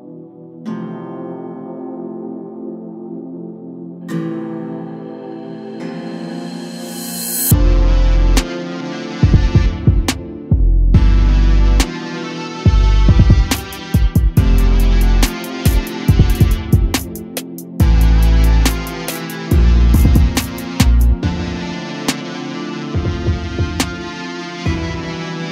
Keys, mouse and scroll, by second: 3.9-6.5 drag, 6.5-8.5 scroll down 1, 8.5-9.2 middle drag, 9.2-12.3 drag, 13.2-14.2 scroll down 1, 14.2 a, 14.5 a, 16.0-17.0 scroll up 3, 17.0 click, 19.7 g, 22.2 scroll down 1, 22.5 a, 22.7 a, 23.7 `.